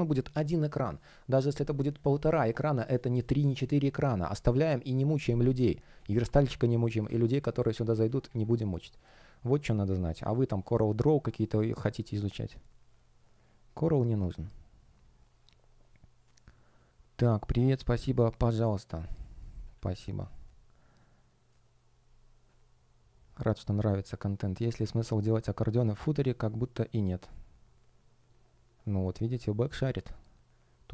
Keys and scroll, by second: 6.9 space, 8.1 super+w.